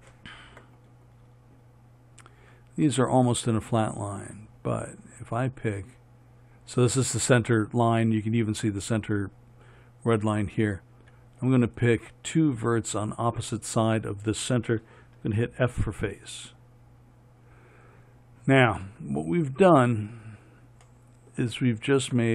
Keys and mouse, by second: 15.7 f, 19.3-22.1 drag, 22.1 middle click, 22.2-22.3 drag.